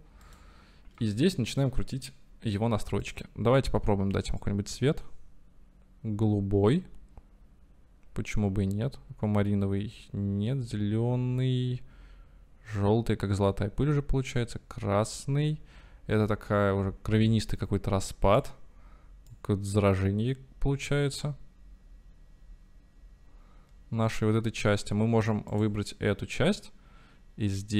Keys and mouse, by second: 0.3 middle click, 3.1 middle click, 19.7-24.4 middle drag.